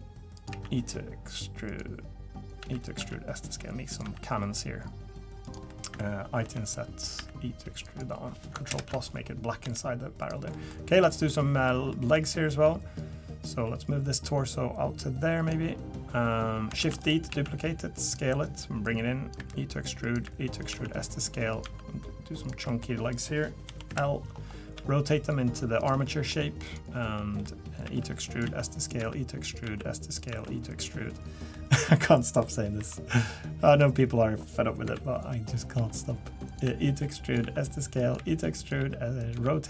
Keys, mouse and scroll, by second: 0.5 e, 2.6 e, 3.0 s, 4.0 e, 5.7 middle click, 6.4 i, 7.2 e, 8.7 ctrl+KP_Add, 9.6 g, 10.5 middle click, 10.9 click, 11.3 middle click, 11.9 middle click, 13.0 click, 16.8 shift+d, 17.3 s, 18.8 click, 19.4 e, 20.2 e, 20.7 s, 21.6 e, 22.7 middle click, 23.1 click, 23.7 l, 23.9 KP_3, 24.7 r, 26.0 middle click, 26.6 click, 27.2 middle click, 27.8-30.3 typing, 31.5 middle click, 32.1 middle click, 32.8 i, 34.8-39.3 typing.